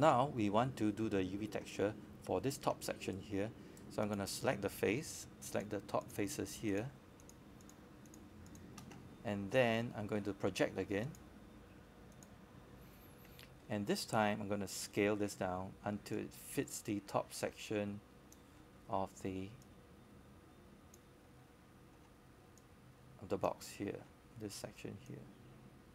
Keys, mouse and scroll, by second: 4.1-4.7 scroll down 1, 6.1-11.4 scroll up 1, 14.5 scroll down 1, 16.0 scroll up 1, 19.7-21.7 scroll down 1, 21.7 right click, 22.6 click, 24.1 shift+click, 24.6 shift+click, 25.3 shift+click, 25.8 shift+click.